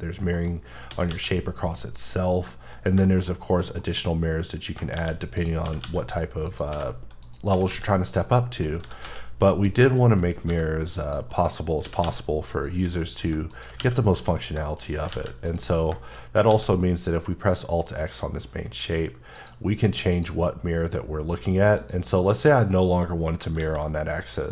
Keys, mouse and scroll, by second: 0.3 middle click, 0.5-0.9 scroll up 3, 0.9 s, 1.1 x, 2.0 click, 2.2 scroll down 2, 2.5 middle click, 2.8 scroll down 1, 3.1 shift+middle click, 3.5-3.8 scroll up 1, 3.8 middle click, 4.0-4.8 scroll up 1, 4.9-7.5 typing, 5.4 click, 6.5 click, 7.2 click, 8.1 click, 8.4 middle click, 8.8 g, 9.1 z, 9.6 click, 9.9 middle click, 10.2 scroll up 2, 10.5 g, 11.0 click, 11.3 middle click, 11.9 s, 12.0 x, 12.5 click, 12.8 scroll down 1, 13.0 middle click, 13.5 shift+click, 13.8 q, 14.2 click, 14.6 shift+middle click, 14.9 scroll down 1, 15.1 alt+a, 15.5 click, 15.8 scroll down 1, 16.0 middle click, 16.5 alt+x, 16.8 middle click, 19.3 click, 23.6 alt+x.